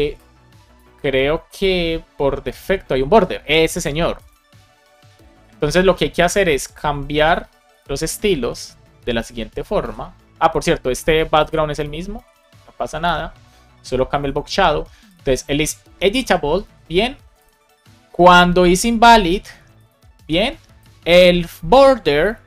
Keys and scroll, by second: 7.3 super+c, 8.9 Return, 9.7 super+v, 12.1 shift+super+Left, 12.7 BackSpace, 19.1 super+c, 20.1 super+v.